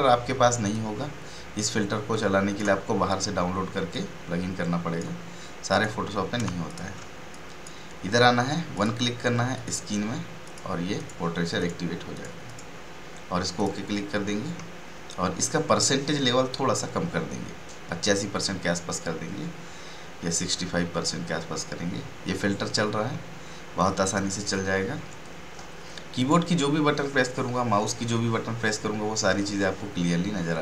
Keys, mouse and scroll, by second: 0.7-5.7 drag, 6.4 ctrl+space, 6.6 ctrl+click, 7.6-8.7 drag, 13.7 click, 26.1 click.